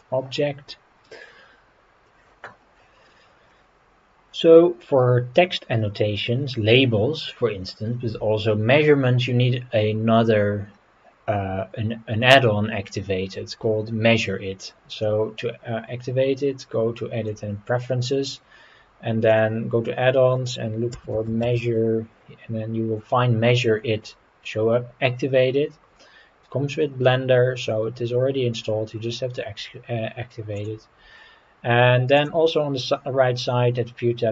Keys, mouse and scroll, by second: 2.0 click, 3.5 middle click, 14.9-17.5 drag, 32.1 click.